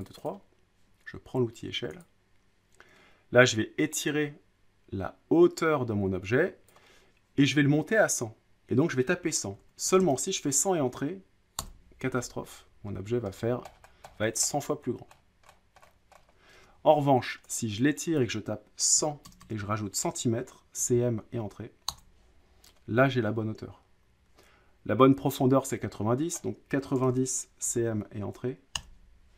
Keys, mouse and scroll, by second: 0.0 click, 0.2 click, 0.3 click, 2.0 click, 6.7 click, 9.5-9.8 typing, 11.6 Return, 12.9-13.3 scroll down 7, 13.3-14.2 scroll, 14.2-15.1 scroll down 17, 15.1-16.3 scroll up 26, 16.3 scroll, 16.5 ctrl+z, 18.2 click, 18.7-21.4 typing, 21.9 Return, 23.2-23.5 scroll, 26.3-27.4 drag, 26.7-28.3 typing, 28.8 Return.